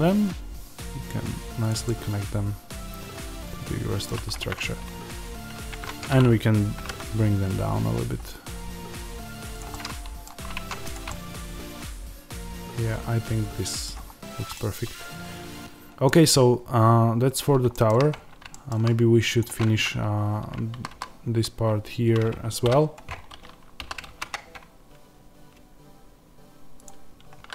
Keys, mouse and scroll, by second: 1.6 click, 1.7-4.4 middle drag, 5.7-9.5 middle drag, 6.7 g, 9.5 click, 9.6-10.8 middle drag, 10.5 Tab, 10.8 click, 11.0-19.3 middle drag, 13.8 scroll down 1, 18.0-18.4 scroll up 2, 19.3 click, 19.6 Tab, 20.7 a, 23.0 scroll up 1, 23.8 s.